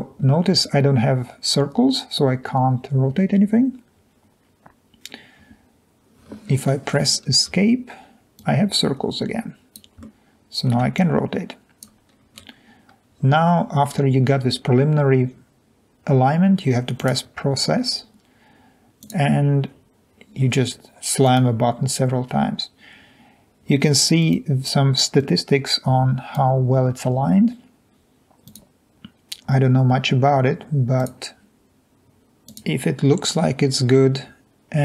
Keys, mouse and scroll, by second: 7.6 Escape, 12.2 scroll up 2, 12.4-13.2 scroll down 2, 17.0 click, 19.0 click, 21.2 click, 24.2 click, 25.2-26.3 drag, 28.5 click, 31.0 click, 32.5 click.